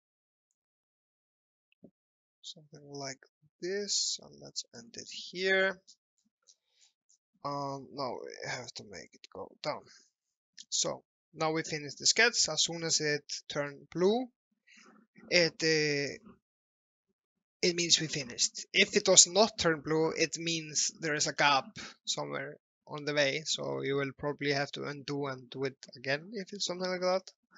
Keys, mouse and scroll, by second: 0.6 click, 5.1-5.4 scroll down 1, 5.6-6.0 scroll up 1, 7.6 alt+middle click, 8.2-9.0 scroll down 1, 9.0 click, 13.3-13.7 scroll down 1, 24.7-26.5 scroll up 1, 27.1 alt+middle click.